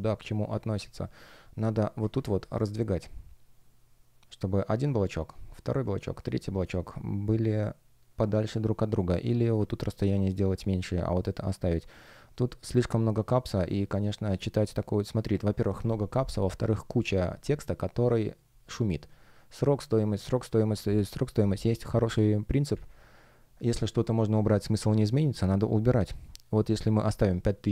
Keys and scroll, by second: 1.3 shift+p, 2.4 F1.